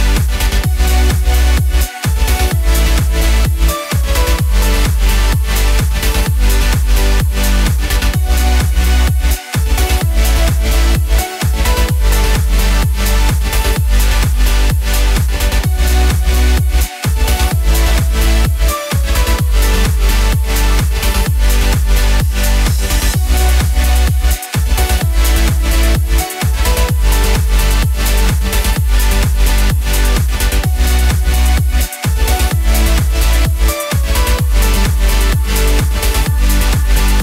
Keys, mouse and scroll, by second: 2.0 middle click, 3.1 click, 4.3 KP_0, 5.7 click, 7.0 click, 7.8-8.2 scroll down 1, 8.4 click, 9.7 s, 11.6 click, 15.0 a, 15.1 a, 16.9 click, 17.4 middle click, 18.7 scroll down 2, 19.9 shift+d, 20.8 click, 22.3 click, 24.7 KP_0, 25.4 click, 25.8 KP_0, 27.4 click, 29.5 click, 31.1 click, 31.7 KP_0, 33.3 middle click, 33.9 scroll down 2, 34.5 shift+a, 36.9 s.